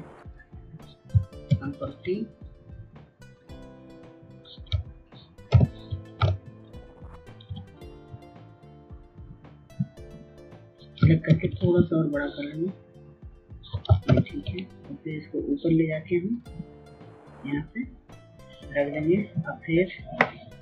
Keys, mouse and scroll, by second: 0.7 ctrl+t, 2.1 shift+click, 4.7 Return, 5.9 ctrl+click, 12.0 ctrl+t, 13.1 shift+click, 14.5 Return, 16.9-20.6 drag.